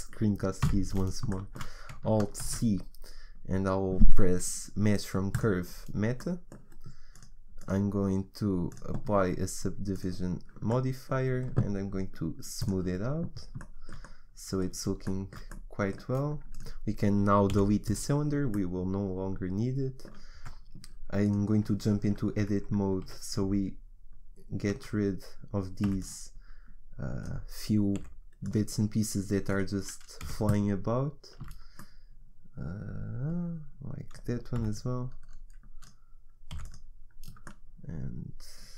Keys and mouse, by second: 0.6 n, 0.9 middle click, 2.4 alt+c, 6.2 click, 7.1-8.3 middle drag, 8.3-10.7 drag, 10.7-12.6 middle drag, 12.6-13.6 drag, 13.6-16.6 middle drag, 16.6 right click, 17.5 Delete, 19.7 middle click, 20.3 Tab, 22.5 Tab, 23.0 a, 24.8 z, 25.9 b, 27.9 Delete, 29.7-31.4 right drag, 30.2 Delete, 31.4 z, 34.5 b, 36.5 Delete.